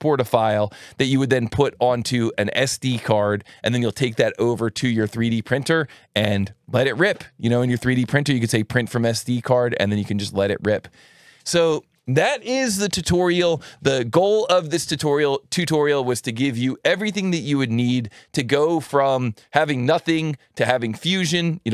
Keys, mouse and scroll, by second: 0.2 click, 8.1 click, 14.3 click.